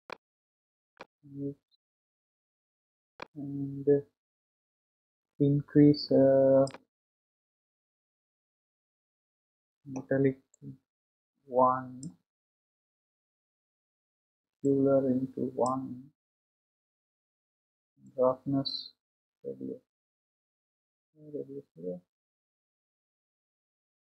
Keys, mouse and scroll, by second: 3.1-13.8 drag, 15.0-21.2 drag.